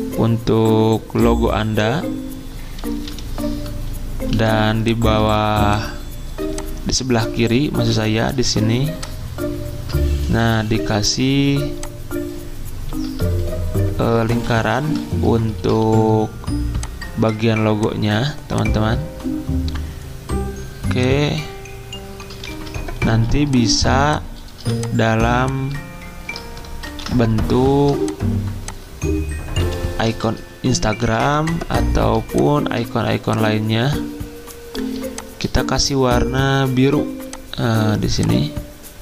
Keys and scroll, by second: 0.0 v, 0.0 d, 2.2 x, 4.4-5.2 typing, 10.6 l, 10.6 d, 14.3 x, 15.8 d, 22.5 ctrl+z, 23.1 z, 24.6 typing, 26.9 ctrl+d, 29.6 i, 31.0 z.